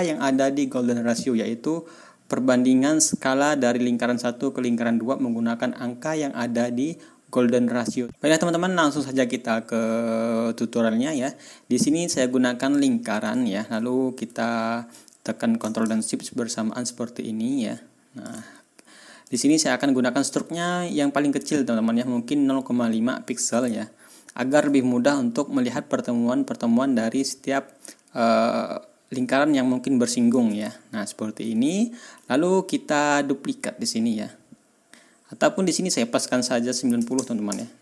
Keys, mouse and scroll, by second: 12.6 middle click, 13.4 ctrl+scroll up 2, 14.9-18.4 ctrl+drag, 18.4-19.2 ctrl+shift+scroll up 1, 19.2 ctrl+click, 19.5-20.1 ctrl+scroll up 2, 23.7-24.0 ctrl+scroll down 2, 29.1-30.4 drag, 30.7 ctrl+scroll down 2, 31.0-31.4 ctrl+scroll up 2, 31.7 ctrl+scroll down 2, 35.9 click, 37.0 KP_9, 37.1 KP_0, 37.4 Return.